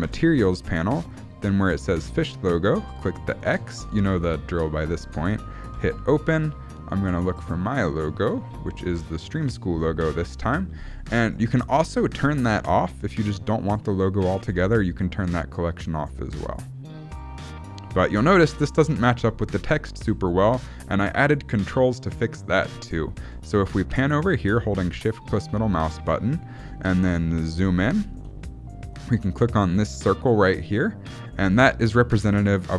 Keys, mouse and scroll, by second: 0.1 click, 3.4 click, 5.8 click, 13.7 click, 14.8 click, 16.6 click, 17.2 click, 24.0 shift+middle click, 25.0 shift+middle click, 27.2-27.6 scroll up 6, 27.7 shift+middle click, 30.2 click.